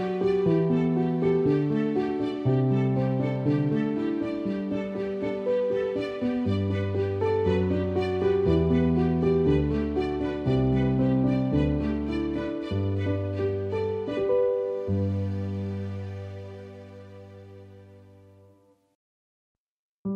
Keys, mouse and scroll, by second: 0.3 click, 1.7 ctrl+alt+click, 7.4 alt+click, 7.5 ctrl+-, 9.1 click, 10.3 ctrl+e, 12.1 ctrl+m, 13.2 click, 15.5 right click, 16.2 click, 17.8 click.